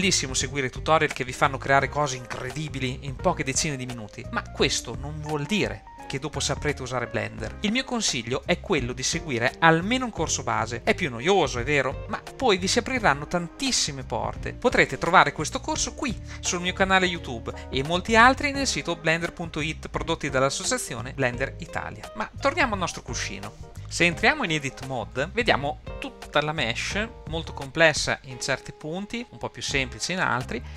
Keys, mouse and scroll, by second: 1.4-3.8 middle drag, 4.3-6.1 shift+middle drag, 28.9-29.2 scroll up 2, 29.2 shift+middle click, 30.6 scroll down 1.